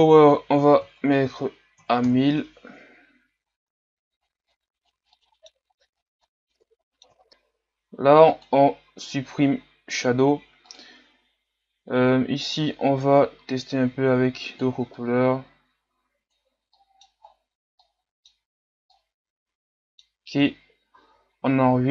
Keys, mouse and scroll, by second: 2.1 KP_0, 3.5-3.9 scroll up 3, 3.9 g, 4.2 r, 4.5 g, 4.9 r, 5.0 middle click, 5.2 scroll up 5, 5.3 middle click, 5.6 scroll down 1, 6.2 middle click, 6.7 scroll down 4, 6.9 middle click, 7.0 KP_3, 7.2 r, 12.6 click, 16.8 middle click, 17.2 scroll up 5, 17.8-21.9 middle drag.